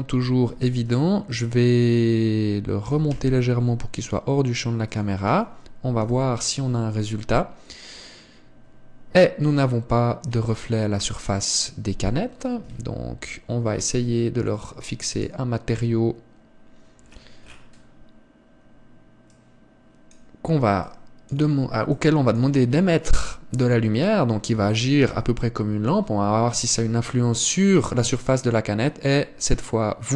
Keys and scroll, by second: 13.5 Escape.